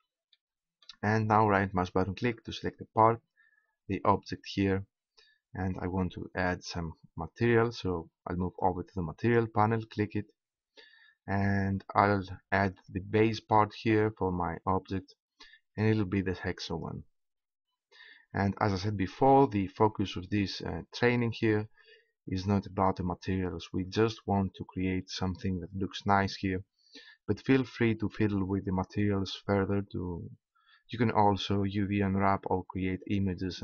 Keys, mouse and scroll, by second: 0.6 click, 2.3-4.0 right drag, 5.3-6.7 middle drag, 9.2 right click, 9.3-10.7 drag, 11.2 middle click, 12.7-14.7 drag.